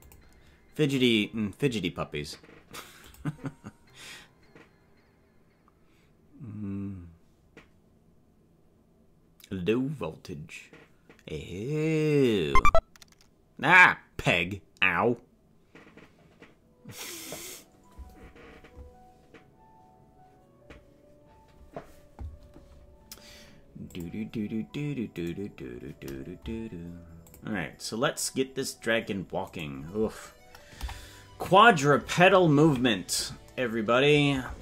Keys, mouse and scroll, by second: 27.3 click, 29.5 right click, 30.7 KP_Decimal, 34.5 ctrl+Tab.